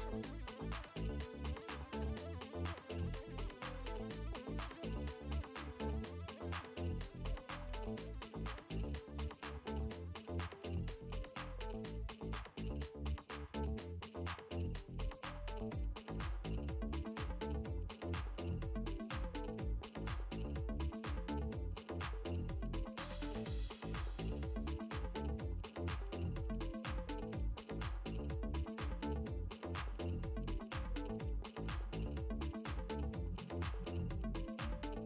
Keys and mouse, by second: 0.4 click, 1.9 space, 2.1 click, 5.1 click, 6.5 ctrl+z, 11.0 alt+click, 14.8 click, 16.9 ctrl+z, 18.1 ctrl+z, 20.0 click, 21.2 ctrl+z, 21.7 ctrl+z, 26.8 ctrl+z, 28.0 r, 29.0 click, 29.8 space, 30.2 click, 30.7 ctrl+space, 31.0 ctrl+space, 31.0 ctrl+click, 32.1 n, 32.5 b, 33.0 space, 33.2 ctrl+click, 34.5 click.